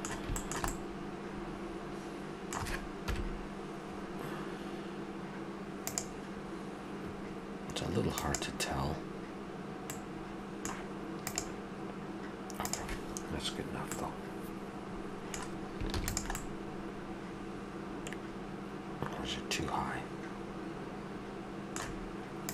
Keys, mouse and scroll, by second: 3.1 KP_1, 9.9-11.3 middle drag, 13.9-15.6 middle drag, 15.9 ctrl+s, 16.3 middle drag.